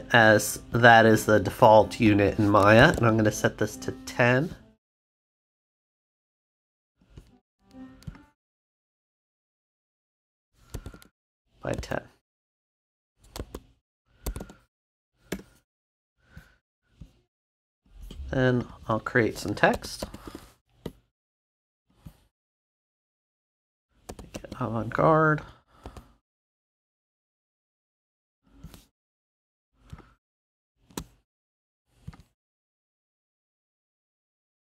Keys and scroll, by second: 2.9 o, 10.9 o, 11.7 Tab, 13.3 Tab, 14.4 0, 15.3 Return, 19.4-20.7 typing, 24.0 a, 24.3 v, 25.8 a.